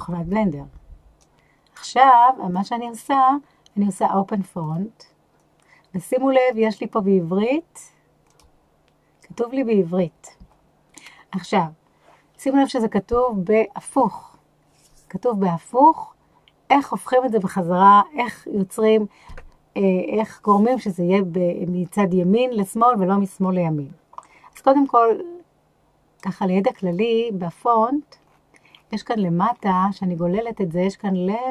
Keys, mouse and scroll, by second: 26.1 click, 26.7 click, 28.2-31.5 scroll down 8.